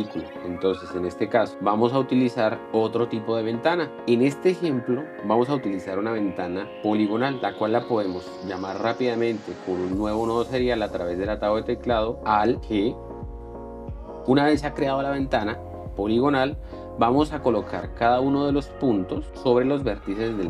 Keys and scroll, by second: 1.5 p, 2.6 Escape, 13.8 alt+g.